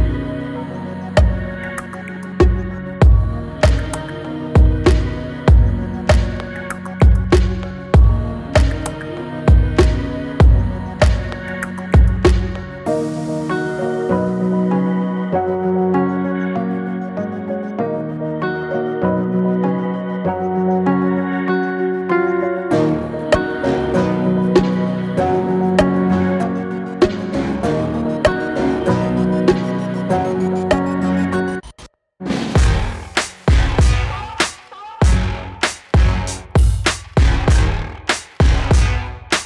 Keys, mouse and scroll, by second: 0.4-1.5 scroll down 1, 1.5 m, 2.8-4.6 shift+drag, 4.6 m, 6.6-8.3 drag, 8.3 m, 9.1 click, 9.4 m, 10.7 m, 11.0 click, 11.2 m, 11.5 click, 11.8 m, 12.1 click, 12.4 m, 15.2 m, 15.3-17.4 drag, 17.4-19.2 drag, 19.2 m, 21.8 m, 21.9 click, 22.8 space, 25.0 click, 29.0-33.9 drag, 33.9-34.3 scroll down 1, 35.4-36.6 scroll up 1, 36.6-39.4 drag.